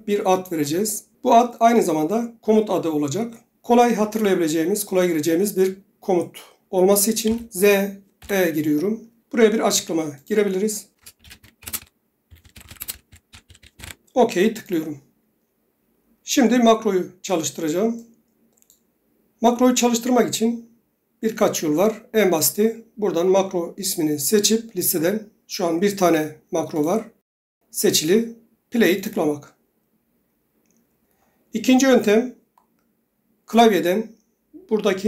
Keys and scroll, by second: 7.4-8.8 typing, 10.8-14.3 typing, 21.0 typing.